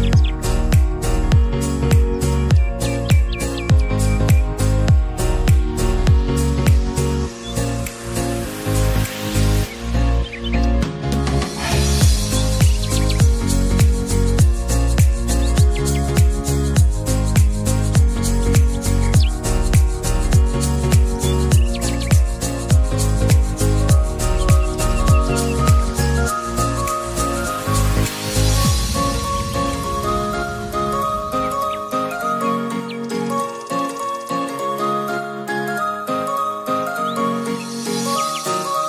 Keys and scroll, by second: 19.8 typing, 21.5 typing, 24.5-26.0 typing, 27.4 typing, 34.0-35.8 typing, 37.6-38.7 typing.